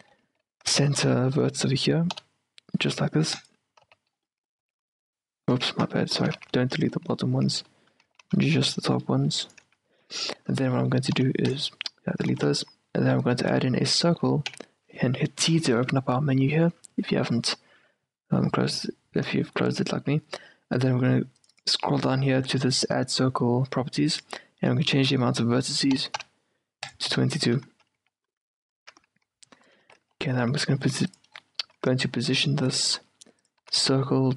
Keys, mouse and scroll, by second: 0.4 z, 2.3 x, 4.0 z, 4.4 middle click, 4.7 Tab, 5.6 Tab, 6.3 ctrl+z, 6.5 ctrl+z, 7.0-9.0 middle drag, 7.5 z, 8.2 z, 8.5 c, 9.6 middle click, 9.8 q, 10.5-14.6 middle drag, 11.3 x, 12.5 shift+a, 14.6 t, 17.7-19.2 middle drag, 21.5-23.3 drag, 23.3 middle click, 23.7-24.1 scroll down 1, 24.2-26.1 drag, 26.3 2, 27.2 t, 28.1 q, 28.9 z, 29.9 z, 30.6 g, 31.4 click, 31.5-32.8 middle drag, 31.8 s, 32.8-34.3 drag, 33.0 g, 33.7 s.